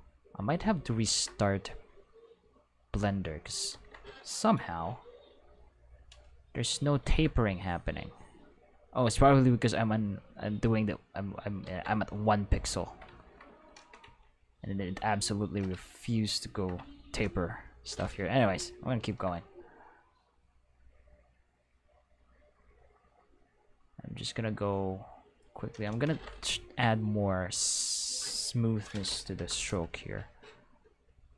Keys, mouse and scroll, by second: 1.1 ctrl+z, 2.0-3.1 drag, 3.7 ctrl+z, 5.5 click, 7.0 ctrl+z, 8.7 click, 11.7 ctrl+z, 14.6 ctrl+click, 20.6-25.6 drag, 26.1 ctrl+z, 27.0 click, 27.8 click, 28.9 ., 29.3 5, 29.4 Return, 31.1 click.